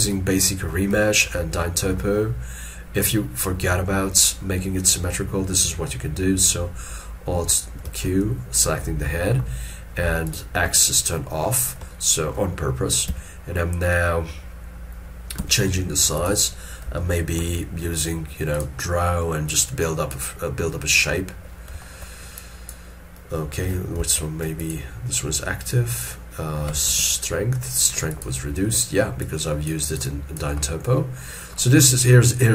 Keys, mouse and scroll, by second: 0.1 middle click, 1.1 shift+middle click, 2.3 scroll up 1, 8.0 alt+q, 9.1 ctrl+middle click, 10.8 ctrl+middle click, 12.0 ctrl+middle click, 17.1 shift+middle click, 21.9 shift+middle click, 24.1 alt+q, 24.7 alt+click, 27.0 shift+f, 30.1 double click, 30.8 middle click.